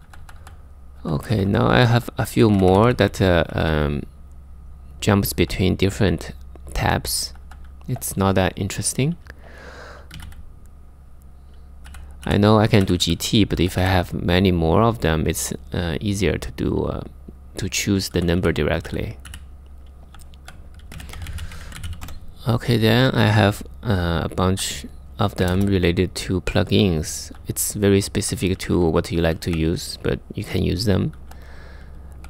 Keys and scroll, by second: 0.0-3.1 typing, 6.8 typing, 9.5-10.3 typing, 11.5-13.2 typing, 17.7-21.5 typing, 23.6-28.7 typing, 30.6-32.2 typing.